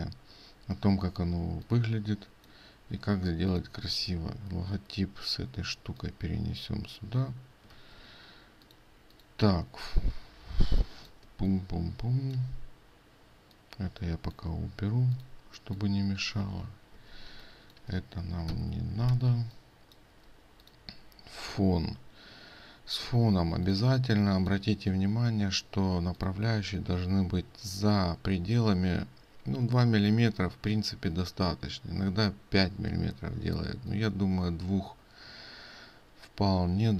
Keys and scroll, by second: 7.8 ctrl+z.